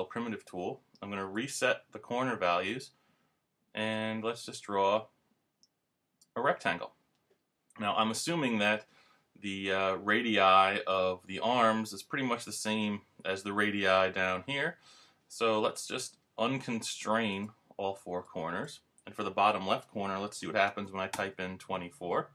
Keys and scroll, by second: 21.1 Return.